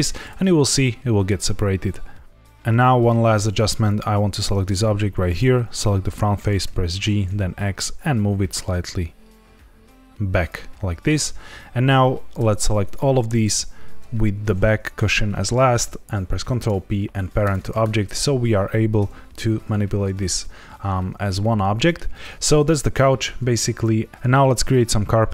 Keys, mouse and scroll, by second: 0.5 z, 3.8 click, 4.6 Tab, 5.2 click, 6.6 g, 7.2 x, 10.3 click, 11.1 Tab, 12.4 shift+click, 12.8 shift+click, 13.3 shift+click, 16.4 ctrl+p, 17.7 click, 18.9 g, 19.5 Escape, 20.3 scroll down 1, 21.1 shift+middle click.